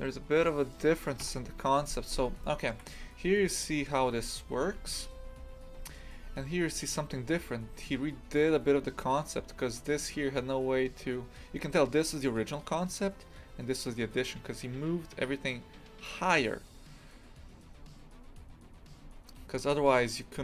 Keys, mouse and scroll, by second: 0.0-1.2 middle drag, 1.2 KP_3, 2.0 scroll down 1, 2.4-20.4 shift+middle drag.